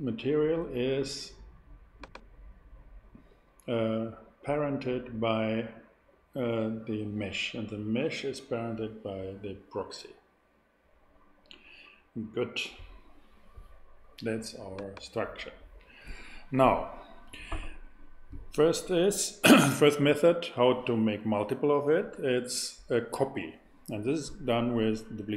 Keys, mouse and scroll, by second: 1.9-4.3 drag, 14.7-18.1 drag.